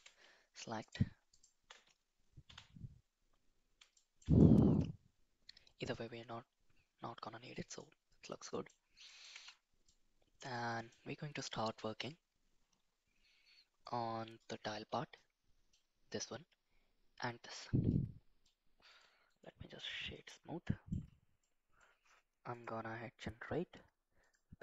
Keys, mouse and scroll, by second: 0.8 click, 2.5 /, 3.9 middle click, 4.4-7.7 middle drag, 8.4 middle click, 9.0 middle click, 9.3 Tab, 9.8-10.9 middle drag, 15.2 middle click, 17.9 middle click, 18.9 click, 19.2 right click, 20.6 middle click, 21.4 middle click, 22.5-24.3 drag.